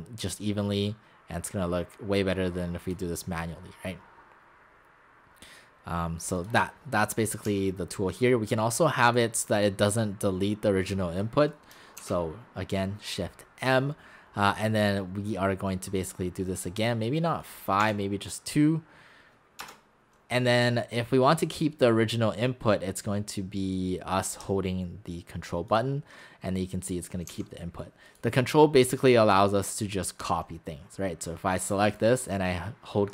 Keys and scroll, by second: 7.5 x, 12.0 shift+m, 17.8 2, 19.6 Return, 27.3 x.